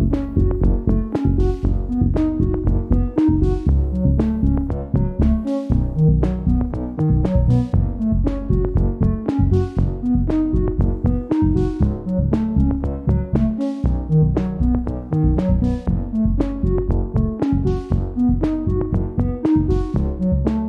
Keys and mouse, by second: 11.8-12.6 shift+middle drag, 14.1-14.7 shift+middle drag, 15.2 click, 17.9 Tab.